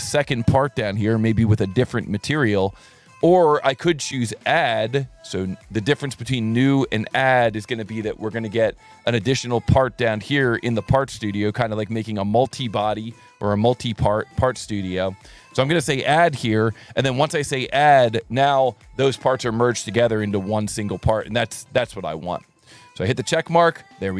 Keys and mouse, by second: 5.0 alt+1, 5.4 click, 6.0 ctrl+shift+click, 6.7 ctrl+shift+click, 7.3-8.9 right drag, 9.1 click, 10.0 ctrl+shift+click, 13.6 alt+1, 15.9 click, 22.8 click.